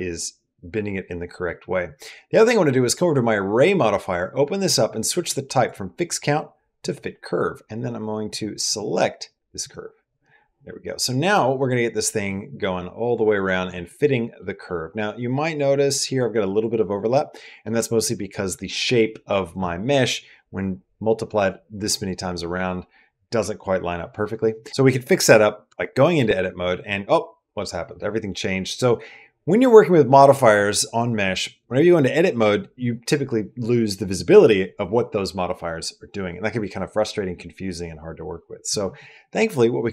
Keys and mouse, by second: 2.2 click, 3.4 click, 5.5-6.7 drag, 10.9-12.1 middle drag, 12.4-13.5 middle drag, 13.8 middle click, 14.4-15.7 middle drag, 17.2 middle click, 25.5 Tab.